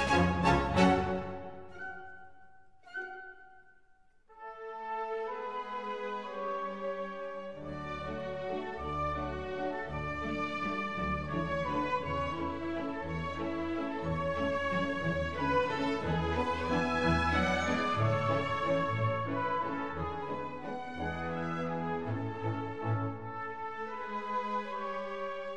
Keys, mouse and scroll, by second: 0.0 ctrl+z, 0.8 Tab, 2.1 Tab, 3.0 Tab, 7.2 KP_1, 8.2-10.1 middle drag, 10.1-12.1 drag, 12.0 middle click, 14.0-16.9 middle drag, 16.9 shift+d, 18.9-20.7 drag, 20.8 r.